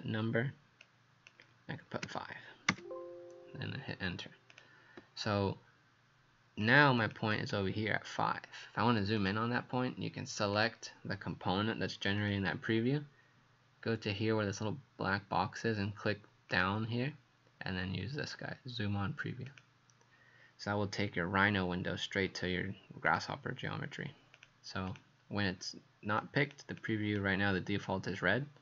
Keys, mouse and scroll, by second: 0.8 click, 2.1 KP_5, 2.7 KP_Enter, 4.5 click, 7.0 click, 9.2 click, 24.9 click, 26.2 click, 26.8 click.